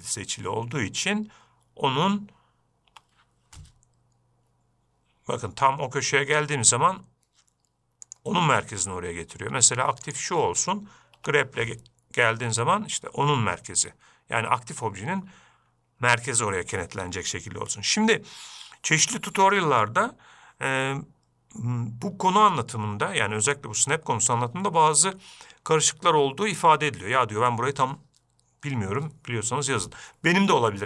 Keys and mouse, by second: 3.3 g, 10.5 shift+click, 11.6 g.